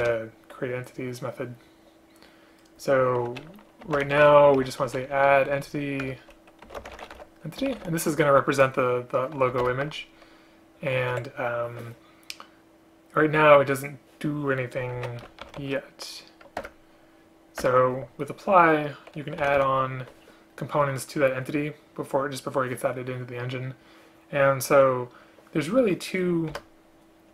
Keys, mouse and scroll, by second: 0.1 BackSpace, 6.2 Return, 9.7 alt+Return, 11.2 Escape, 16.7 Return, 17.7 Return, 26.6 Return.